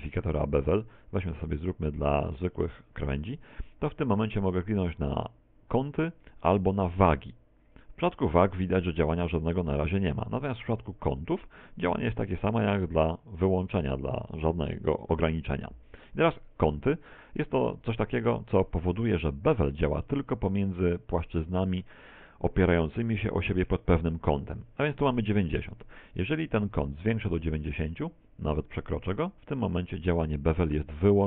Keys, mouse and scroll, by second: 0.9 click, 4.3 click, 6.6 click, 9.8 click, 20.1 middle click, 21.2 middle click, 26.7 click.